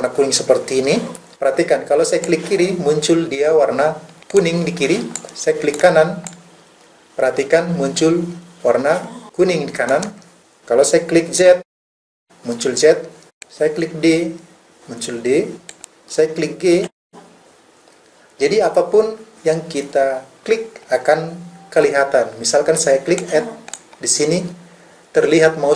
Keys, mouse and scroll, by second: 2.2-4.4 drag, 6.3-10.3 right drag, 11.6 z, 13.9 d, 15.7 click, 16.8 g, 23.3-25.7 drag.